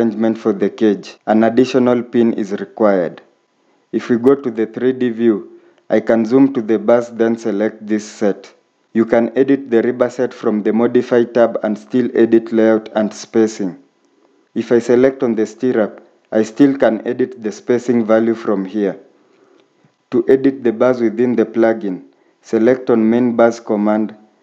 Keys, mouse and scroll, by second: 5.4 scroll up 1, 19.8 scroll down 1.